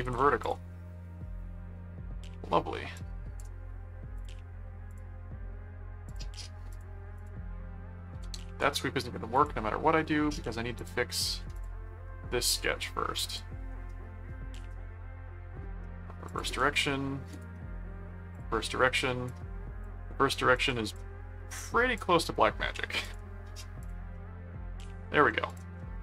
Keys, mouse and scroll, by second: 0.0 alt+v, 0.4 click, 3.0 click, 4.1 click, 4.9 click, 6.0 click, 6.7 click, 9.3 click, 10.7 click, 12.5 ctrl+1, 13.3 click, 14.6 right click, 16.3 click, 17.3 right click, 18.3 click, 19.3 click, 20.5 click, 21.6 click, 23.0 click, 23.8 click, 24.1 middle click, 25.0 middle click, 25.5 click, 25.7 middle click.